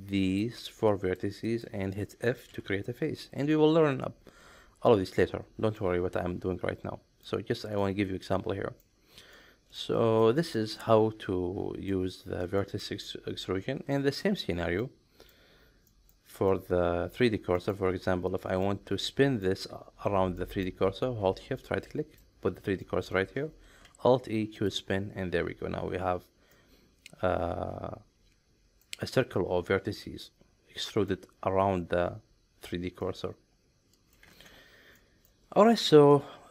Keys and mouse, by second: 1.0 shift+click, 1.5 shift+click, 2.5 f, 2.8-3.5 middle drag, 4.9 middle click, 5.8-7.2 middle drag, 7.8-8.8 middle drag, 9.3-9.8 middle drag, 10.4 shift+middle click, 10.8-11.9 middle drag, 12.6 shift+middle click, 13.0 middle click, 13.9 middle click, 14.8 middle click, 15.9 middle drag, 16.5 middle click, 17.5 middle click, 18.3 click, 18.6 middle click, 20.4 middle click, 21.6 shift+right click, 22.8 middle click, 23.9 alt+e, 26.5-28.8 middle drag, 30.9 middle click, 33.0-34.1 middle drag, 34.3 ctrl+z, 35.0 middle click, 35.8 shift+middle click, 36.1-36.5 middle drag.